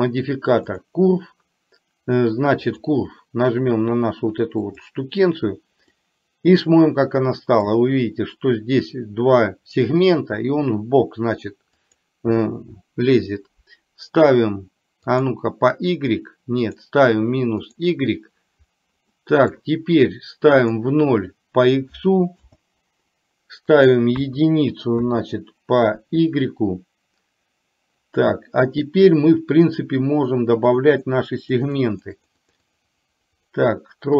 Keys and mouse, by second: 2.8 click, 6.0-7.6 middle drag, 12.0-15.4 drag, 16.8-17.9 drag, 19.3 middle click, 20.6-22.5 drag, 23.8-25.1 drag, 30.8 click, 31.0 click, 31.5 click, 31.8 click, 32.0 click, 32.4 click, 32.8 click, 33.0 click, 33.4 click.